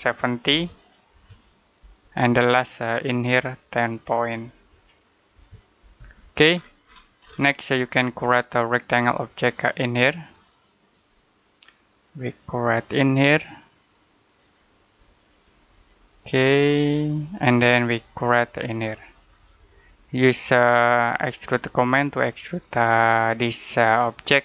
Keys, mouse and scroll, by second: 0.4-0.9 typing, 1.7 Return, 2.6 click, 4.6-5.2 typing, 5.8 Return, 6.4 scroll down 1, 6.7-8.6 scroll up 1, 8.6 click, 15.1 Escape, 16.1 click.